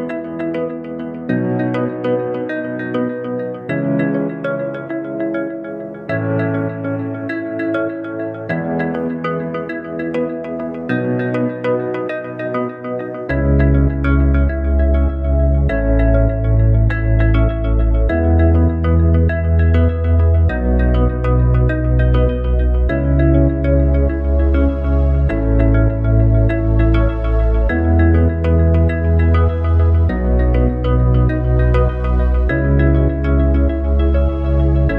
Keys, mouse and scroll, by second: 0.3 s, 2.0 Tab, 3.8 click, 5.1 click, 7.0-9.5 drag, 9.5 e, 15.3 click, 16.4 e, 23.4 click, 24.2 click, 25.3 click, 29.8 click, 30.9 click, 32.0 e.